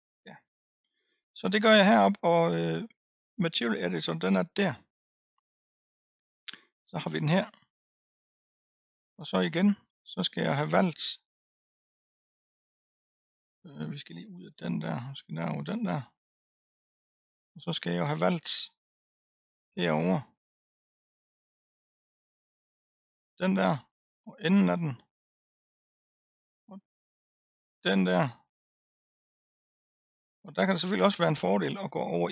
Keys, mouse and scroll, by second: 4.2-5.9 drag, 9.6-10.1 scroll up 2, 12.0 click, 12.6-15.0 scroll up 2, 15.0 click, 15.9-16.4 scroll up 1, 16.4-22.0 middle drag, 22.0 l, 24.2 l, 24.7-27.7 middle drag, 28.0 l, 29.3-32.3 middle drag.